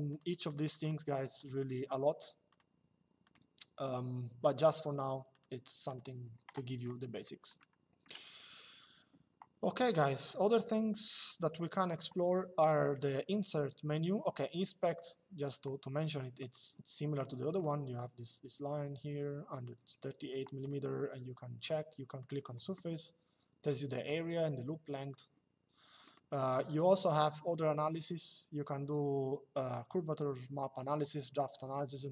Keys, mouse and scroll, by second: 2.2 click, 4.1 click, 6.8 middle click, 7.3 shift+middle click, 12.0 click, 16.1 click, 17.3 click, 20.3 click, 21.9 click, 25.7 click.